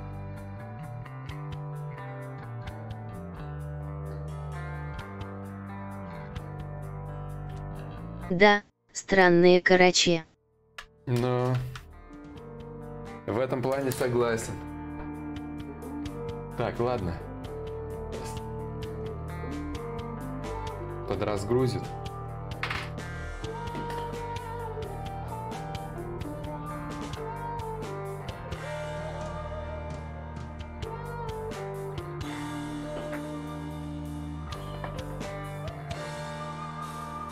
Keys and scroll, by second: 6.6 shift+d, 9.2 shift+d, 11.6 d, 15.4 d.